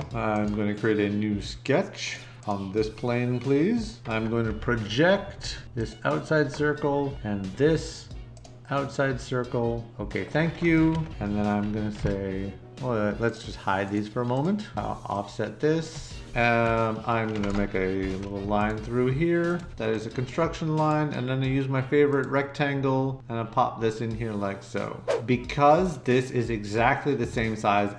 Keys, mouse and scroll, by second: 17.9 l.